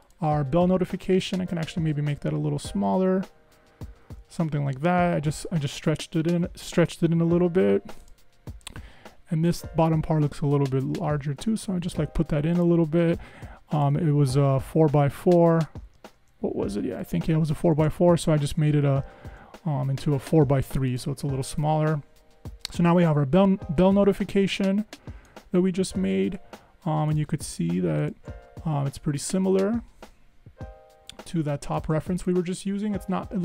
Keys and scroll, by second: 2.0 Right, 2.4 super+Left, 2.9 super+Left, 10.6 super+Up, 11.3 Up, 15.0 super+Down, 15.5 Down, 18.3 super+Up.